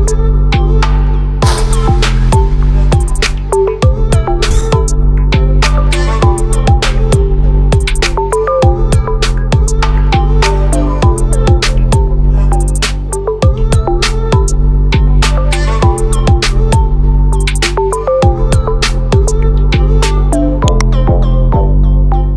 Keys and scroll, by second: 5.7 ctrl+z.